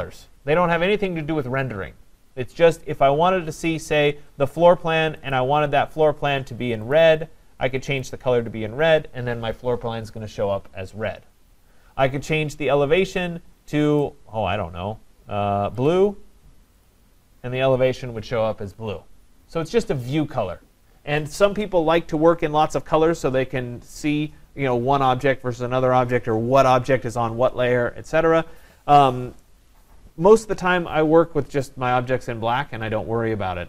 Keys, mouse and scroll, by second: 5.3 click, 7.0 click, 8.0 click, 13.1 click, 14.0 click, 15.9 click, 16.9 click.